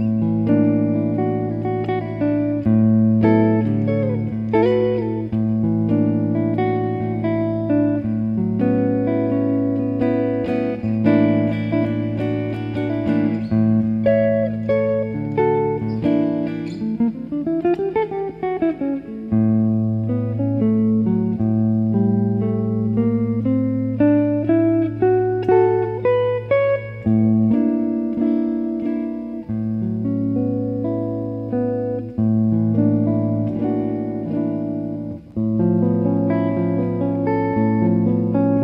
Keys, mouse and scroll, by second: 4.7-7.0 drag, 7.7-10.4 middle drag, 10.4 click, 13.1 click, 16.0-21.1 middle drag, 21.1 click, 23.5-26.5 drag, 26.3 right click, 26.5-28.2 middle drag, 32.2 click, 32.2 typing, 34.0-36.4 middle drag, 34.9 KP_0, 36.4 click.